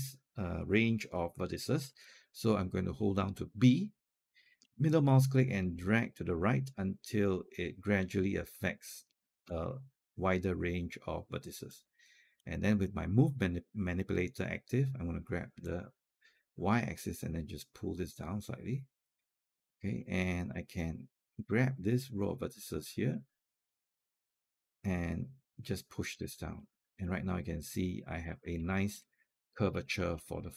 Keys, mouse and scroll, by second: 3.9-5.0 typing, 4.5 middle click, 6.2-11.2 middle drag, 6.2 b, 11.5 alt+click, 15.4-19.3 drag, 19.5-25.9 alt+drag, 26.4-28.1 alt+drag, 28.3 scroll down 1, 28.5 alt+click, 29.5-29.9 alt+scroll down 2, 30.1-30.5 alt+drag.